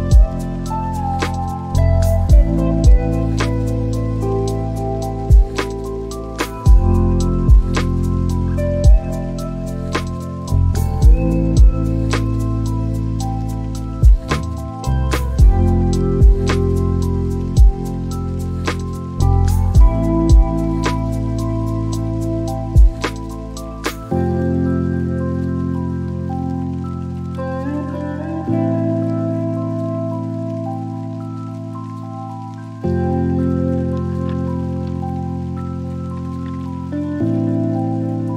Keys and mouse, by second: 0.5 space, 1.5 shift+g, 4.7 BackSpace, 12.3 click, 22.0 Tab, 23.6 s, 28.5 click, 37.0 g, 37.5 z.